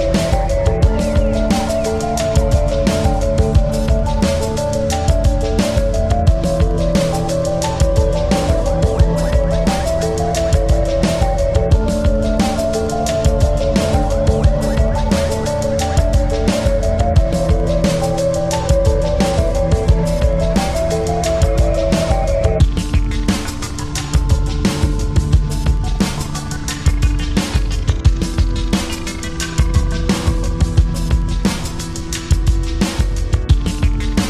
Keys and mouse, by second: 2.5 click, 2.5 typing, 4.6 click, 4.6 typing, 6.1 click, 6.1 typing, 9.0 click, 11.3 click, 11.3 typing, 12.6 click, 12.6 typing, 12.7 ctrl+-, 13.9-16.1 typing, 14.6 click, 15.1 click, 17.4 click, 17.5 space, 18.2 click, 19.8 click, 20.4-22.4 typing, 21.2 ctrl+=, 23.9 typing, 24.2-25.8 alt+drag, 26.6 click, 26.6-29.3 drag, 26.6 typing, 29.5 click, 29.5 typing, 29.9-34.2 shift+drag.